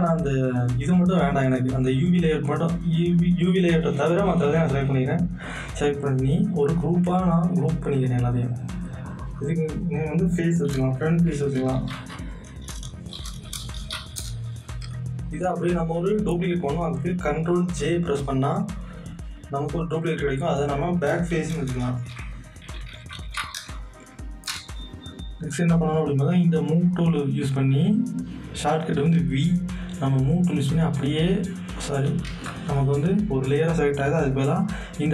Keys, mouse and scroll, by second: 6.9-9.0 drag, 9.2 click, 10.4-14.5 typing, 15.2 click, 17.7 ctrl+j, 20.1 click, 21.3-23.8 typing, 24.5 Return, 26.9 Return, 26.9 click, 30.5-32.2 drag, 32.2 ctrl+z.